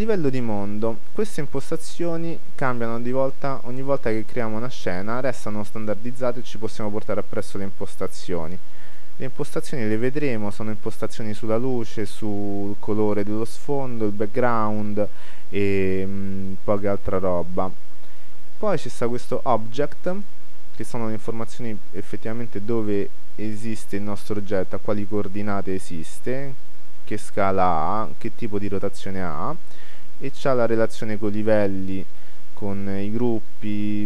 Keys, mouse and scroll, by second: 0.6-3.4 middle drag, 12.5-21.3 middle drag, 14.3-14.8 scroll down 1, 21.3 click.